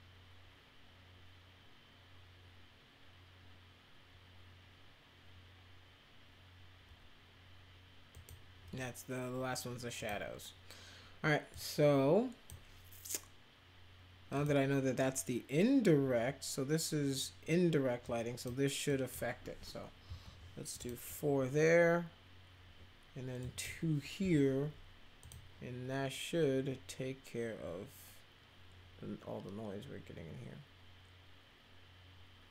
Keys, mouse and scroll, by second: 8.1 click, 9.9 click, 11.5-12.4 drag, 14.3 click, 18.0 click, 18.8 click, 20.0 4, 20.8 click, 23.4 click, 24.1 2, 25.2 click.